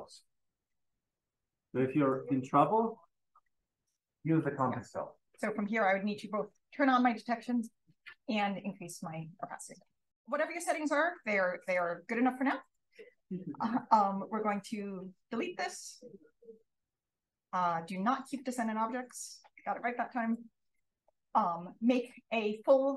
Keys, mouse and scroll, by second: 6.4 click, 7.5 click, 9.4 click, 11.6 click, 11.9-12.5 scroll down 1, 12.4 click, 13.7-15.3 drag, 19.0 click, 19.6 drag, 20.1 click.